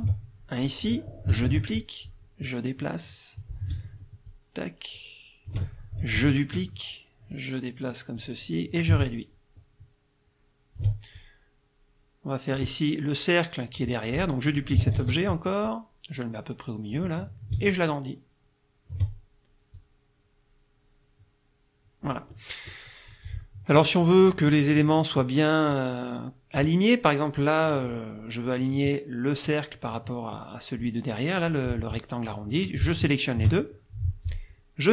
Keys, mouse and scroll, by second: 1.5 ctrl+d, 2.1-3.6 drag, 4.3-5.7 ctrl+shift+drag, 6.2 ctrl+d, 7.3-8.4 drag, 8.9-11.0 ctrl+shift+drag, 11.2-12.8 ctrl+shift+drag, 15.0 ctrl+d, 15.7-17.1 drag, 17.6-19.1 ctrl+shift+drag, 19.8-22.3 drag, 25.7-26.8 drag, 27.4 click, 33.0 shift+click.